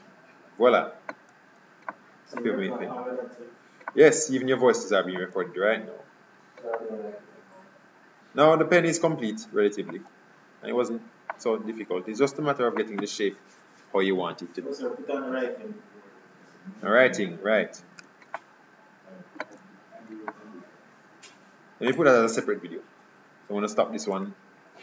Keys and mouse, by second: 2.0-4.4 middle drag, 11.4-13.0 middle drag, 18.4-24.8 middle drag.